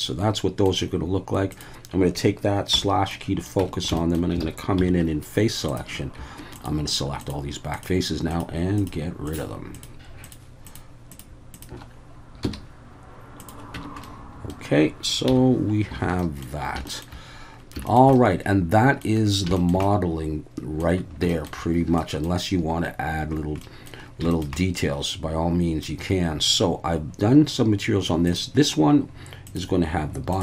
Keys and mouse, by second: 2.7 /, 3.1-3.5 middle drag, 3.6 Tab, 4.0 shift+middle click, 4.4 alt+a, 4.8 3, 5.7 click, 7.2 shift+click, 7.7 shift+click, 8.3 shift+click, 8.8 shift+click, 9.3 shift+click, 10.2 shift+click, 11.1 shift+click, 11.5 shift+click, 12.4 x, 13.7 Tab, 14.0-14.5 middle drag, 15.3 /, 16.0 alt+a, 16.2 middle click, 16.9 shift+middle click, 17.9 shift+middle drag, 18.1-19.0 middle drag, 19.6 shift+middle click, 19.8-20.8 middle drag, 21.3 shift+middle click, 22.0 middle drag, 23.6 middle drag, 24.3 shift+middle click, 24.6-25.8 middle drag, 28.3-30.4 drag.